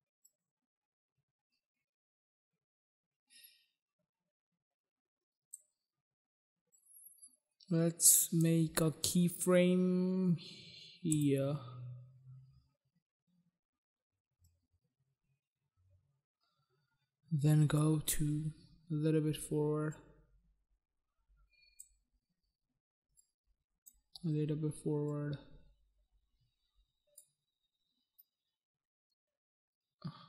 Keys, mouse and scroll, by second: 0.5 click, 6.9 click, 11.2 click, 11.4 click, 14.5 click, 20.1 click, 23.4 click, 25.3 click, 28.4 click.